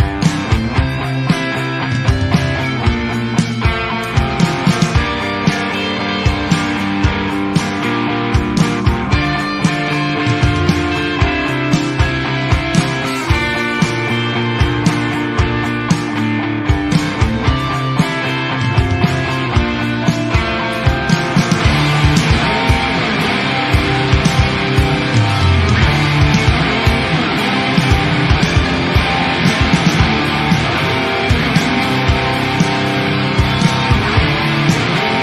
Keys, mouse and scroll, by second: 0.1 Tab, 0.5 ctrl+r, 1.9 ctrl+r, 3.0 alt+a, 3.3-3.6 shift+middle drag, 3.6 Tab, 3.9 Tab, 4.2 Tab, 4.4 Tab, 4.5 Tab, 4.8 Tab, 5.1 click, 5.4-6.3 shift+middle drag, 6.3 Tab, 6.5 alt+a, 7.6 Tab, 8.5-9.6 drag, 9.6 Tab, 10.1-10.7 scroll up 4, 10.7 alt+click, 12.1 alt+a, 12.4 alt+click, 13.8 click, 14.2 alt+a, 14.5 alt+click, 14.7 alt+a, 15.1 shift+click, 15.3-15.7 shift+middle drag, 15.7 shift+click, 16.0 shift+click, 16.2 shift+click, 16.9 shift+click, 17.2 shift+click, 17.4 shift+click, 17.6 shift+click, 17.9 shift+click, 18.3 shift+click, 18.7 shift+click, 19.0 shift+click, 19.6 shift+click, 19.8 shift+click, 20.1 shift+click, 20.6 ctrl+e, 22.1 middle click, 22.4 scroll down 3, 22.6 shift+middle click, 22.9-23.3 scroll up 4, 23.3 click, 24.2 shift+click, 24.4 shift+click, 24.8 shift+click, 25.4 shift+click, 26.0 shift+click, 26.8 shift+click, 27.1-27.6 scroll down 1, 27.6 scroll down 1, 27.7 ctrl+r, 28.7-29.8 middle drag, 29.8 ctrl+r, 30.7 alt+a, 30.9-31.3 scroll up 1, 31.3 shift+click, 31.6 shift+click, 31.9 shift+click, 32.1 shift+click, 32.4 shift+click, 32.7 shift+click, 32.9 shift+click, 33.1 shift+click, 33.4 shift+click, 33.6 shift+click, 34.3 shift+click, 34.6 shift+click, 34.9 shift+click, 35.1 shift+click.